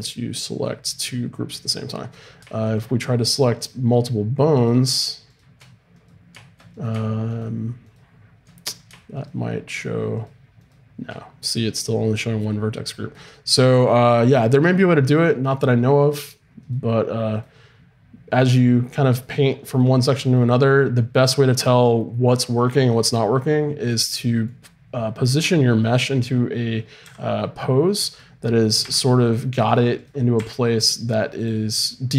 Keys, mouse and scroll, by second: 0.5-1.6 drag, 2.7-5.9 right drag, 5.9-11.2 drag, 11.2-23.9 right drag, 23.9-27.0 middle drag, 27.0 r, 28.8 r, 30.0-32.1 right drag, 30.4 r.